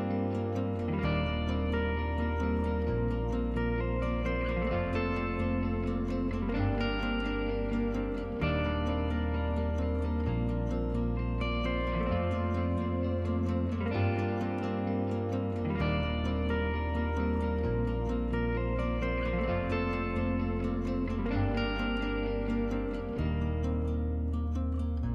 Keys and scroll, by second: 2.2-2.9 typing, 5.3 #, 15.7 x, 17.5 typing, 19.2-19.9 typing.